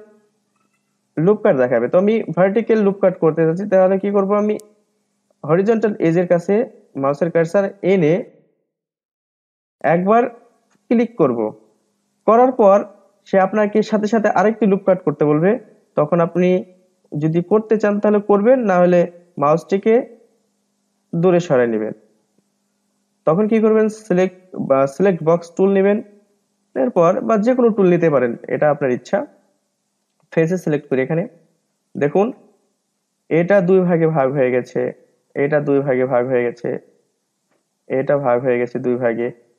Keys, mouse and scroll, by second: 10.6 click, 16.3-19.3 middle drag, 21.8-24.9 middle drag, 24.9 click, 25.8-28.8 middle drag, 30.0 click, 31.8 click, 32.3 click, 32.7 click, 33.2 drag, 33.5 click, 33.9 click, 34.3 middle click, 35.1 click, 35.5 drag, 35.9-37.7 middle drag, 37.7 drag, 38.2 click, 38.6-39.5 middle drag.